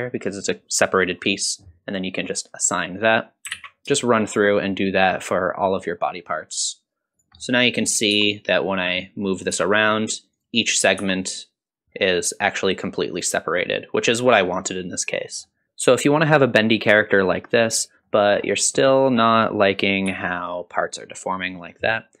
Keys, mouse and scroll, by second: 2.4 click, 3.4 alt+a, 3.4 shift+middle click, 3.5 click, 3.6 scroll down 1, 3.7 shift+middle click, 3.7 scroll up 1, 3.8-7.1 typing, 4.0 click, 4.0 alt+a, 4.1 click, 4.2 alt+a, 4.2 click, 4.4 click, 4.4-4.9 scroll down 6, 4.5 click, 4.6 click, 4.9 scroll up 3, 5.1 click, 5.2 alt+a, 5.3 click, 5.4 alt+a, 5.5 click, 5.9 alt+a, 6.3 click, 6.4 alt+a, 6.5 click, 6.6 alt+a, 6.7 scroll down 1, 6.7 click, 7.0 alt+a, 7.1 Tab, 7.4 middle click, 8.1 r, 9.3 click, 9.5 r, 10.8 click, 11.0 r, 15.5 middle drag, 15.6-16.6 scroll down 1, 18.2 middle click, 19.0 click, 20.1 g.